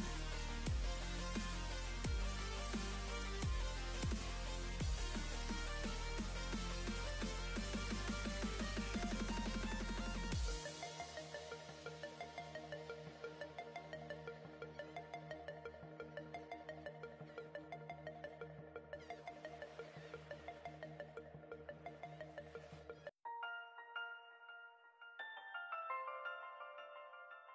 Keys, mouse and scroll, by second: 2.1-2.7 scroll up 2, 2.7-3.3 scroll down 2, 3.3-5.1 middle drag, 5.1-5.6 scroll down 1, 5.6-7.0 middle drag, 7.0-7.5 scroll up 3, 7.5 click, 12.7-13.0 scroll down 1, 13.0-14.9 middle drag, 14.9-16.1 scroll down 16, 16.1-17.3 middle drag, 17.3-19.0 scroll up 1, 19.0-19.4 scroll up 1, 20.0-22.2 drag, 22.2-23.0 scroll up 11, 23.0 click, 24.3 ctrl+t, 25.0 click, 26.5-27.5 middle drag.